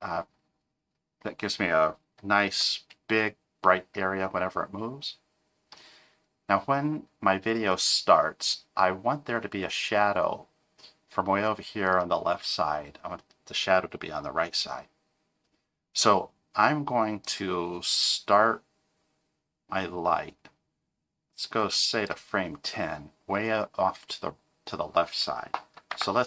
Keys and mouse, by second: 2.5 g, 17.2-22.1 drag.